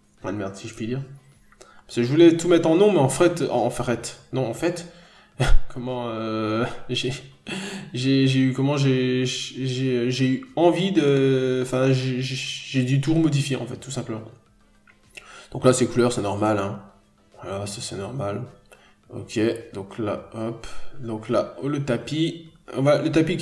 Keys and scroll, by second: 0.2 scroll up 1, 0.4 n, 1.5-1.8 scroll down 1, 11.2 scroll up 1, 11.4 n, 13.0 n, 13.9 b, 17.3 n, 19.5 ctrl+z, 20.3-20.7 scroll down 1, 20.8 b, 21.9 scroll down 1, 22.1 n, 22.4-22.8 scroll up 1.